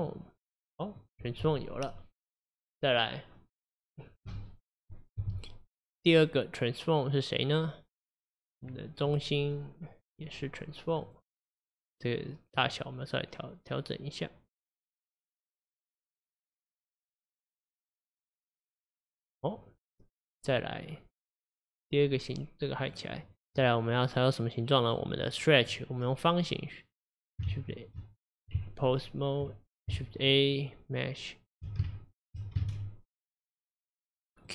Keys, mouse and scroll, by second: 8.6 click, 10.0 click, 12.7-15.7 drag, 17.5-20.5 middle drag, 22.9 click, 23.3 click, 27.5 shift+a, 28.6 Tab, 30.0-31.6 shift+a, 31.9 shift+a, 32.7 shift+a.